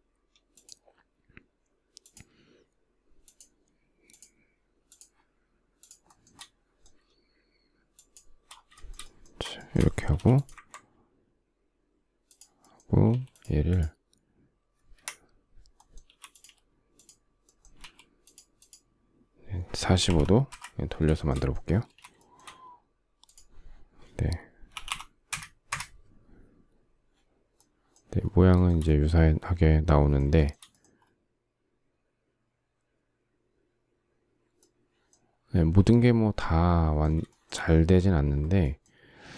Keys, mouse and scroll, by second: 0.1 shift+click, 1.7 shift+click, 2.9 shift+click, 3.7 shift+click, 4.5 shift+click, 5.4 shift+click, 5.7 shift+middle click, 7.6 shift+click, 8.3 shift+middle click, 9.2 shift+middle click, 9.8 m, 12.7 q, 14.6 Escape, 15.7 m, 17.4 q, 19.3-20.2 typing, 20.8 shift+middle click, 21.5 space, 22.0 shift+middle click, 24.1-25.0 typing, 28.2 shift+middle click, 30.0 shift+middle click, 36.9 shift+middle click, 38.7 space.